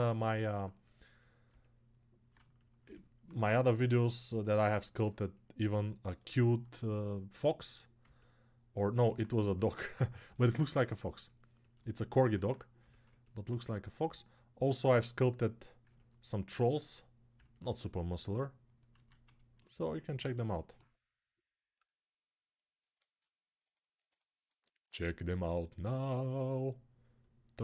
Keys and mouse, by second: 0.6-5.0 right drag, 12.2-27.6 alt+right drag, 18.8 alt+q.